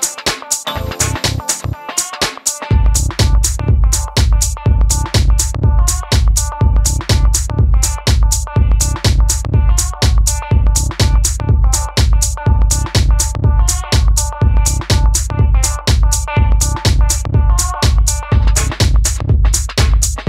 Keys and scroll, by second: 8.4 Tab, 8.5 Tab, 8.5 Tab, 8.8 Tab, 9.2 Tab, 14.1 1, 14.2 Return.